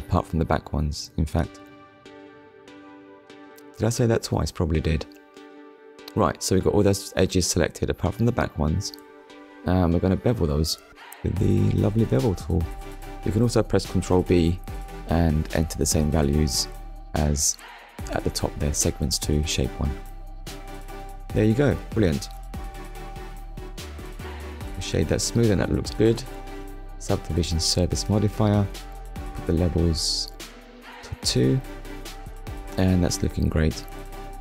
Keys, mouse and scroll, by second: 0.4 shift+click, 1.1 shift+click, 1.7 middle click, 2.8 shift+click, 3.4 middle click, 4.8 shift+click, 5.5 middle click, 8.0-8.8 scroll up 3, 8.9 shift+middle click, 12.3 click, 13.2 middle click, 14.3 click, 21.0 click, 21.7 click, 22.3 middle click, 23.0 Tab, 24.2 right click, 24.8 click, 26.3 click, 28.6 click, 30.7 middle click, 32.3 click, 33.5 middle click.